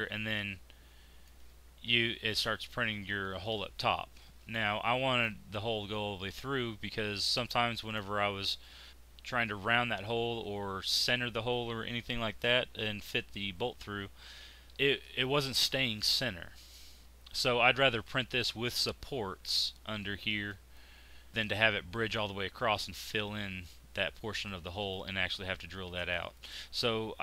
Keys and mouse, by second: 0.7-3.2 middle drag, 4.5 middle click, 7.2-14.7 middle drag, 16.7 middle click, 20.0-24.6 middle drag.